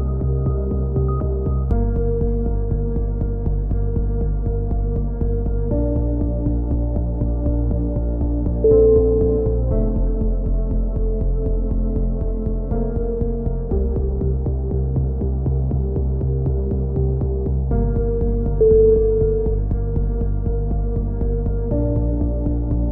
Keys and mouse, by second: 0.3 a, 0.4 click, 0.7 right click, 1.2 f, 1.2 a, 1.9 click, 1.9 KP_3, 2.8 right click, 2.9 click, 3.4 a, 3.9 click, 4.7 KP_3, 5.2 z, 5.4 click, 5.7 right click, 5.9 KP_3, 6.2 click, 7.1 a, 7.3 click, 8.2 KP_7, 8.6-10.2 right drag, 9.0 f, 10.1-12.0 typing, 10.4-12.0 right drag, 12.1-13.2 drag, 13.4 click, 13.4 KP_7, 13.9 z, 17.2 right click, 17.4 e, 18.3 KP_3, 18.6 click, 20.0 click, 20.0 a, 20.6-21.7 right drag, 21.0 f, 21.7 click, 22.2 KP_7, 22.5 click.